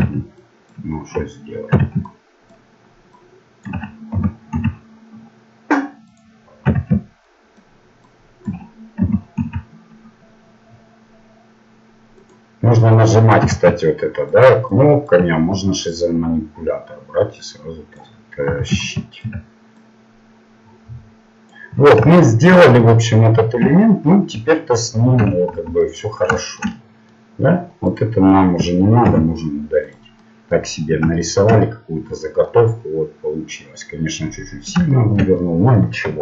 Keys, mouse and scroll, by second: 0.0 a, 0.8-3.3 drag, 1.8 a, 4.2 g, 6.8 a, 7.6-9.9 drag, 9.0 g, 13.5 a, 14.3-17.9 drag, 18.5 a, 19.3-21.8 drag, 21.8-23.2 middle drag, 23.6 a, 25.2 Tab, 25.5 z, 25.9-27.9 middle drag, 27.9 click, 30.0 Delete, 30.5 middle click.